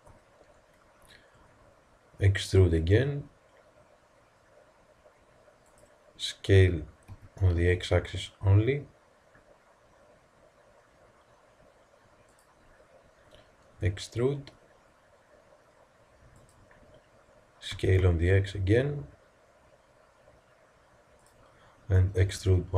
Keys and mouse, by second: 2.6 e, 7.1 s, 13.6 e, 17.7 s, 22.3 e.